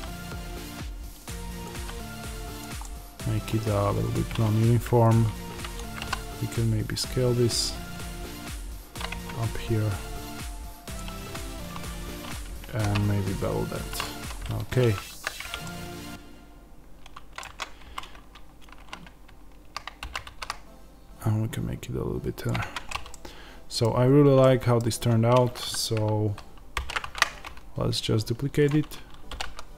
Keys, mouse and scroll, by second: 1.2 click, 1.7 g, 2.5 click, 2.7-4.0 middle drag, 4.0 click, 5.0 alt+click, 5.9 s, 10.9 click, 11.0 Tab, 12.6 ctrl+b, 13.9 click, 14.0 Tab, 14.3-15.1 scroll down 2, 15.1 scroll down 1, 15.1 z, 15.5-22.3 middle drag, 17.3 Tab, 17.7 a, 19.9 s, 22.3 click, 22.5 Tab, 23.0-28.6 middle drag, 23.9-24.3 scroll up 2, 26.6 alt+d, 28.6 click, 29.3 r.